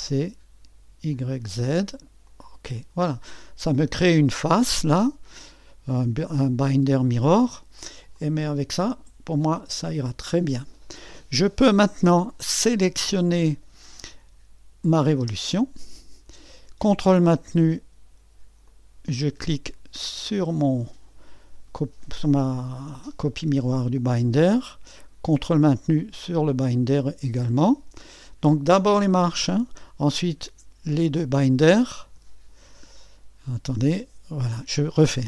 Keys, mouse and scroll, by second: 1.3 click, 2.4 click, 4.2 click, 8.1-12.2 drag, 14.8-18.4 drag, 18.6-22.7 drag, 26.2-35.2 drag.